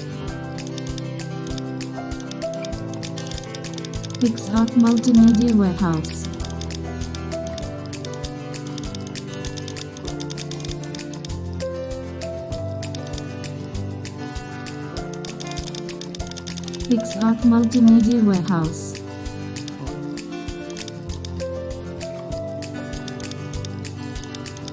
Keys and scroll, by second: 0.0 super+j, 0.3 alt+shift+n, 0.7 super+space, 11.3 super+0, 12.9 super+space, 18.7 super+0, 21.6 super+e, 22.0 super+a, 22.0 super+c, 22.1 super+w, 22.3 super+v, 22.8 super+t.